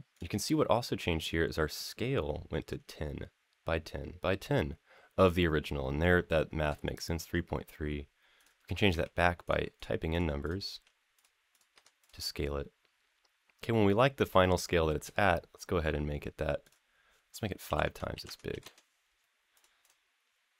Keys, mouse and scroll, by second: 8.2-9.3 drag, 9.5 click, 10.2 click, 11.3 click, 12.2-13.5 scroll up 4, 13.5 middle click, 14.5-14.8 shift+middle drag, 16.4-19.4 drag, 19.6 click.